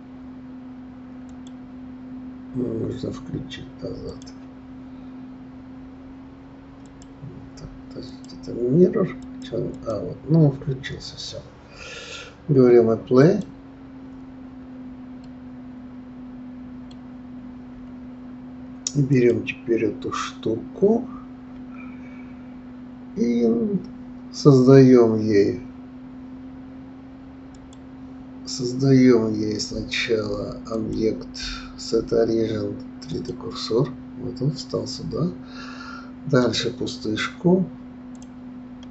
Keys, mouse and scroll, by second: 1.3 click, 4.3 click, 6.8 click, 8.3 click, 9.2 click, 9.9 click, 11.2 scroll down 2, 13.2 click, 14.5 scroll down 2, 15.1-17.7 middle drag, 19.1 click, 27.5-27.9 drag, 30.7-33.7 drag, 36.4-38.2 drag.